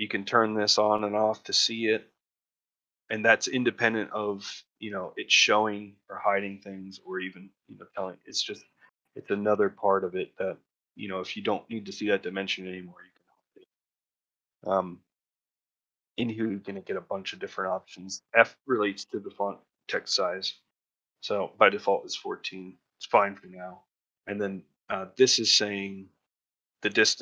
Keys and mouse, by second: 0.3 click, 0.6 click, 0.9 click, 1.2 click, 10.7 click.